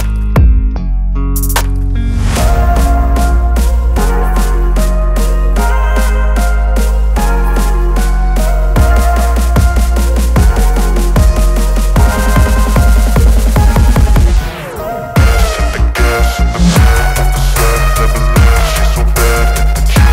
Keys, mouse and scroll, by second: 2.2-2.9 drag, 11.2-12.6 drag.